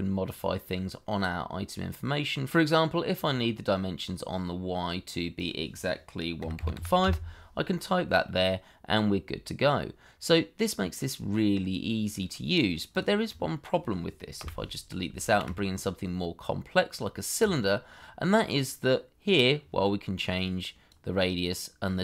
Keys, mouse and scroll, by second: 1.2 middle click, 6.4 KP_1, 6.5 KP_Decimal, 6.7 KP_5, 7.0 KP_Enter, 8.2 middle click, 11.9-12.2 scroll down 1, 12.2 middle click, 13.2 double click, 14.4 Delete, 15.3 shift+a, 18.1-18.5 scroll up 1, 18.5 middle click.